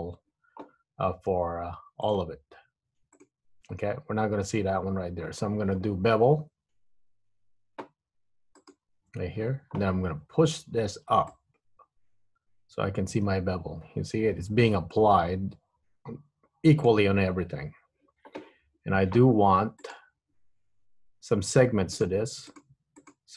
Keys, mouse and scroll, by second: 2.3 alt+shift+click, 3.3 alt+shift+click, 8.7 click, 11.5 click, 20.2 click, 22.0 click, 23.1 click.